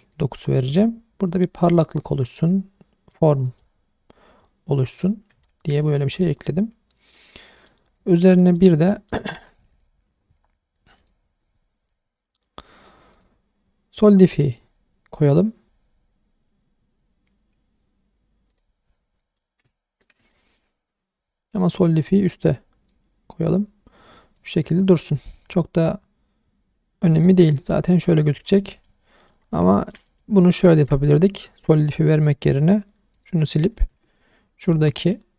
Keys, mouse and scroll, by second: 0.5 click, 0.8-1.5 scroll down 1, 1.6 scroll down 1, 1.7-3.1 middle drag, 3.3 scroll up 2, 3.6-5.0 middle drag, 5.4 shift+middle drag, 5.8-7.7 middle drag, 8.0 middle drag, 8.4 shift+middle drag, 8.8 scroll up 1, 8.9 middle drag, 9.4 click, 9.7 click, 11.0 click, 13.1-18.6 drag, 19.2 middle click, 19.7-20.1 ctrl+middle drag, 20.3 shift+middle drag, 21.8 click, 22.5 click, 24.1 scroll down 2, 24.4 middle click, 25.2-25.5 scroll down 1, 25.5-27.5 middle drag, 27.7 scroll down 1, 27.9 click, 28.5-28.8 scroll up 2, 28.8 scroll down 1, 28.8-29.3 middle drag, 29.4 scroll up 1, 29.7 shift+middle drag, 30.1 middle click, 30.4 scroll up 1, 30.7 shift+middle click, 31.3 scroll up 1, 31.5 shift+middle click, 33.1 click, 33.9 Tab, 34.3 scroll up 1, 34.7 2, 34.9 middle click.